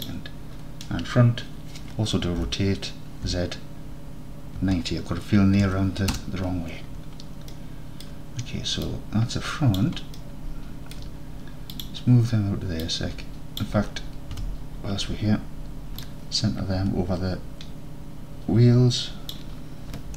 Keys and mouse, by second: 2.5 r, 3.3 z, 4.7 KP_9, 5.7 KP_0, 6.2 KP_Enter, 7.6 alt+click, 8.0 alt+click, 9.1 click, 10.2-11.0 alt+drag, 11.8 click, 12.9 click, 14.4 KP_3, 16.1 click, 17.4-19.4 shift+middle drag.